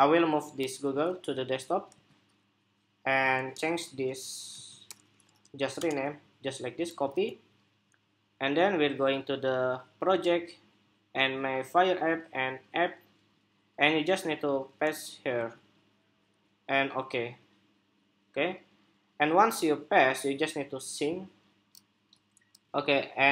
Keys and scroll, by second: 0.4 super+c, 1.6 super+v, 6.6 super+c, 15.0 super+v, 22.5 shift+super+2.